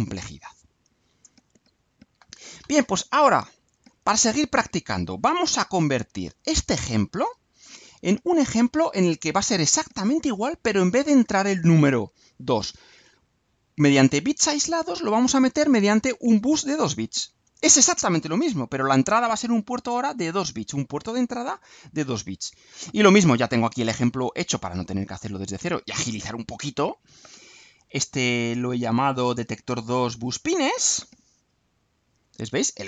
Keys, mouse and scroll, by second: 7.8 click, 9.2 scroll up 2, 9.7-10.8 right drag, 30.1 click, 31.9-32.8 drag.